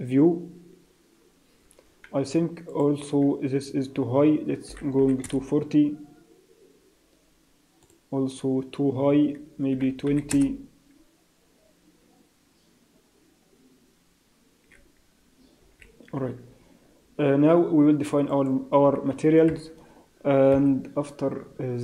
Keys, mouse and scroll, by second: 5.4 click, 10.3 click, 18.8 Escape, 18.8 z, 19.4 KP_0, 20.5 KP_1, 20.9 scroll up 1, 21.4 scroll down 1, 21.6-21.8 scroll down 2.